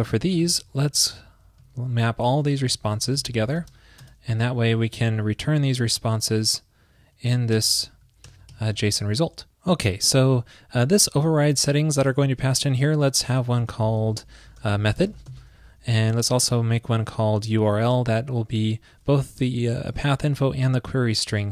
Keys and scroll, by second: 2.2 alt+Left, 5.7 super+Right, 6.0 alt+Left, 6.1 alt+Left, 7.9 alt+shift+Left, 8.7 alt+Right, 11.7 alt+shift+Left, 17.1 alt+shift+Left.